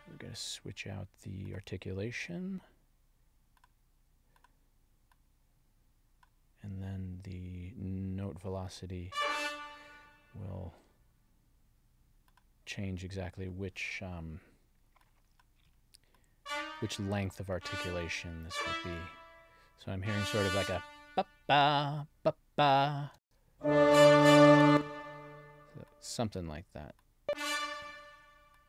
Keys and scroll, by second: 23.1 space, 24.5 space.